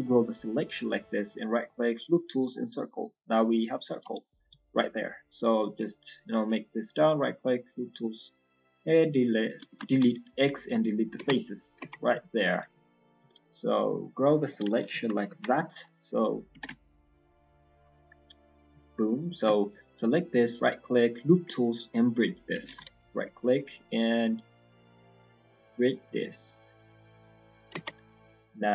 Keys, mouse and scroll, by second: 1.2 right click, 2.7 middle click, 4.4 s, 9.5 ctrl+z, 11.3 middle click, 11.8 Tab, 12.5 alt+click, 12.8 middle click, 13.1 s, 14.1 scroll down 2, 14.6 KP_1, 14.8 KP_3, 15.2 KP_1, 15.5 scroll up 1, 16.5 g, 18.0 middle click, 18.0 scroll up 1, 19.2 alt+shift+click, 19.6 middle click, 20.6 right click, 22.6 ctrl+z, 23.4 right click, 23.5 right click, 27.4 middle click, 27.7 Tab, 27.9-28.3 scroll down 6, 28.3 middle click.